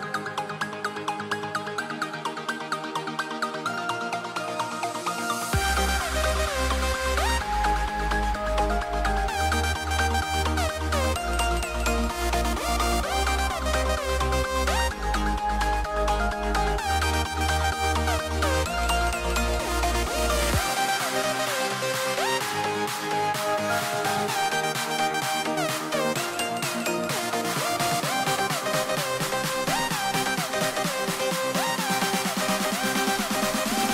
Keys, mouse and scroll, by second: 2.1 s, 6.4-8.6 middle drag, 10.9-12.2 scroll down 2, 13.4 c, 15.9 ctrl+b, 18.6-24.3 middle drag, 24.3 shift+a, 27.3 s, 30.5 g.